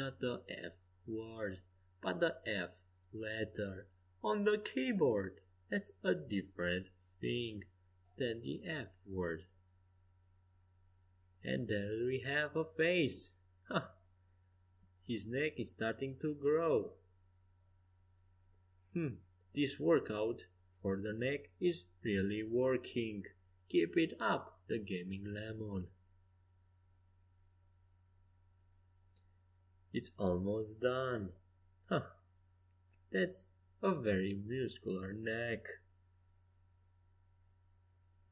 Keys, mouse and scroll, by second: 0.3 middle click, 2.0-2.6 scroll up 1, 2.6 middle click, 3.9 middle click, 6.7-8.6 middle drag, 8.7 middle click, 9.3-12.3 right drag, 12.3 f, 16.5-20.4 right drag, 19.2 f, 19.8-22.4 middle drag, 21.5-24.5 right drag, 23.8 f, 24.3-31.0 middle drag, 29.4 f, 32.0-35.8 right drag, 34.6 f, 35.1-36.8 middle drag, 35.4 click.